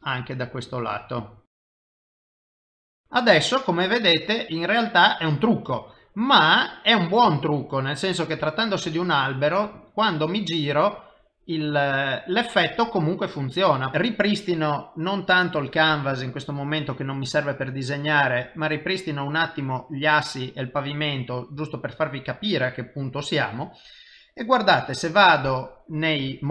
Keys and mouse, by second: 0.7 click, 0.9-2.5 click, 1.5 click, 1.6 click, 2.9 middle click, 7.3 shift+middle click, 7.8 middle click, 8.5 shift+middle click, 13.9 middle click, 15.1 click, 15.3 click, 20.8 middle click, 24.7 click, 25.7 middle click.